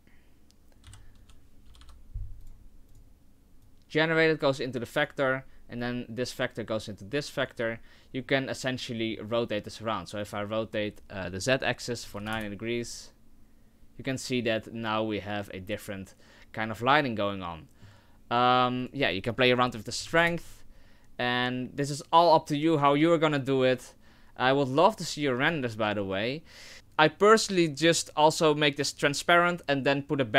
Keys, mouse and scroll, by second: 1.9 p, 3.8 click, 7.3 click, 8.5 middle click, 10.7 click, 18.7 middle click, 19.7 click, 27.8 click, 29.1 click.